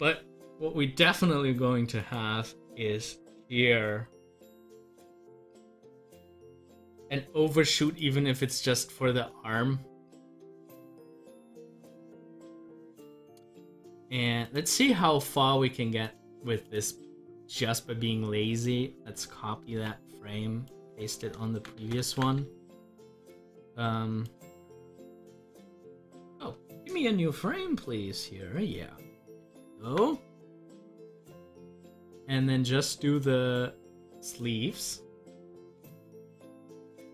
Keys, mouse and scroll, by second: 2.0 scroll up 1, 12.4 scroll down 1, 14.4-19.7 drag, 19.7 ctrl+c, 27.5 d, 36.1 Delete, 37.0 scroll up 1.